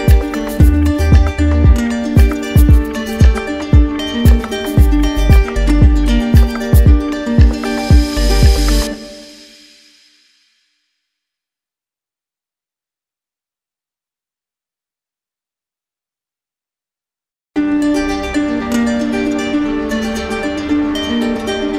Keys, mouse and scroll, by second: 0.6-1.7 drag, 7.6-8.7 drag, 11.5-12.5 drag, 14.7-15.8 drag, 18.6-19.6 drag.